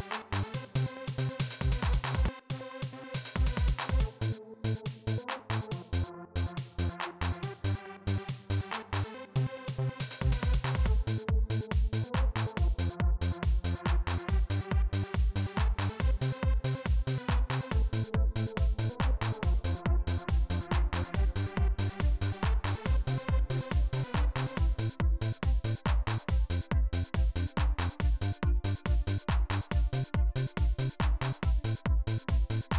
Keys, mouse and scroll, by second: 0.3 click, 1.0 right click, 2.0 click, 7.9 right click.